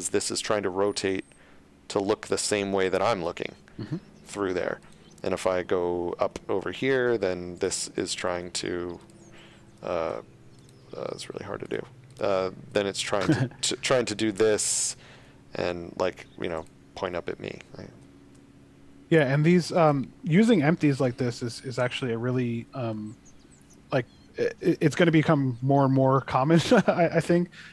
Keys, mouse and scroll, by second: 4.8 right click, 5.3 middle click, 7.6 right click, 8.3 g, 9.0 right click, 9.6 r, 10.6 right click, 12.8 r, 13.2 z, 14.4 click, 14.8 r, 15.2 x, 16.6 right click, 17.5 ctrl+z, 18.3 middle click, 19.2 scroll down 1, 19.6 shift+middle click, 20.3-20.7 scroll up 1, 20.8 shift+middle click.